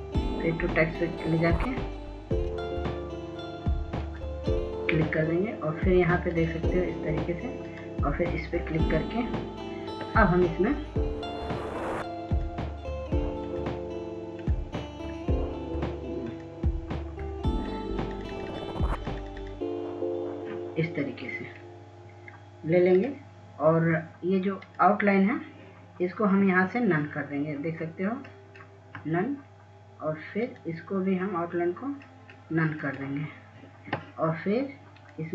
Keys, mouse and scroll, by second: 11.3-11.7 scroll up 1, 13.7-21.3 drag, 23.0-23.3 scroll down 1, 25.0 click, 30.4 right click, 32.5 click, 34.9 right click.